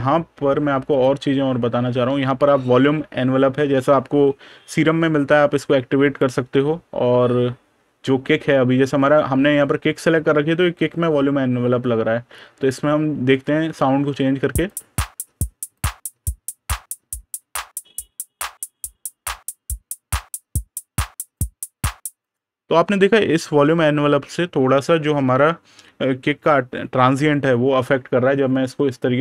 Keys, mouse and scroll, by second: 1.7 super+KP_Add, 5.9 click, 6.6 super+KP_Subtract, 9.2 super+KP_Add, 10.3 super+KP_Subtract, 10.4 super+KP_Add, 11.4 super+KP_Add, 11.5 super+KP_Subtract, 14.5 click, 22.1 click, 29.1 click.